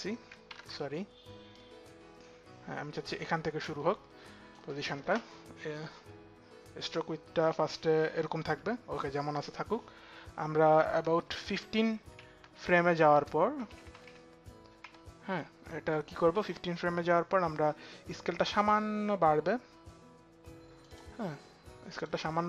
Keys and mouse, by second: 0.0 click, 0.1 ctrl+z, 11.2 shift+Page_Down, 11.8 shift+Page_Down, 12.6 shift+Page_Up, 12.6 shift+Page_Down, 13.3 shift+Page_Down, 17.4 Page_Down, 18.3 Page_Down, 18.3 click, 20.5 click.